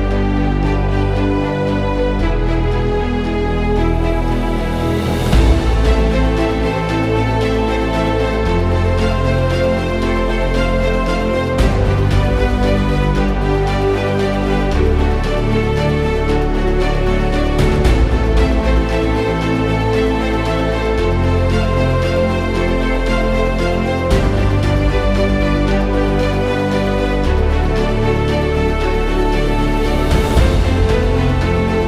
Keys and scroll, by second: 0.4-3.5 typing, 7.8-11.4 typing, 13.0 typing, 15.4-16.3 typing, 18.8 ctrl+z, 18.8 typing, 20.4-24.2 typing, 25.3 typing, 28.0-31.8 typing.